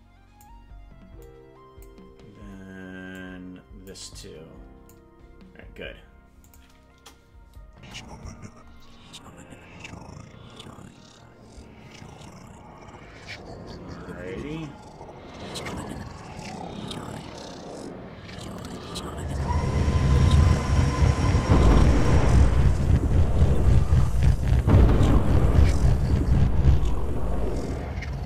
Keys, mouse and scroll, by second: 1.2 click, 3.1 click, 4.1 click, 6.5 click, 6.9 KP_0, 7.7 space, 8.3-8.8 scroll up 10, 9.2-9.8 scroll down 2.